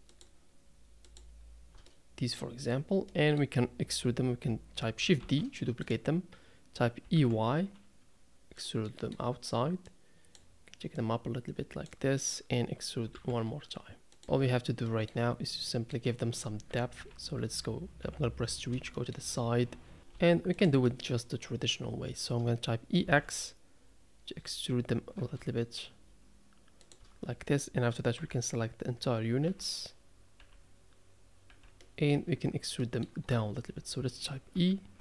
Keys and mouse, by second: 1.0 shift+click, 1.9 middle click, 3.1 middle click, 5.2 shift+d, 7.0 e, 8.9 middle click, 10.1 click, 11.0 click, 13.1 e, 14.4 Tab, 14.9 click, 15.7 middle click, 17.0 KP_7, 18.0 KP_3, 18.9 shift+middle click, 19.7 z, 20.1 z, 20.9 shift+middle click, 21.3 middle click, 23.1 e, 28.2 l, 29.4 l, 30.4 l, 31.5 l, 31.8 middle click, 32.8 click, 34.9 e.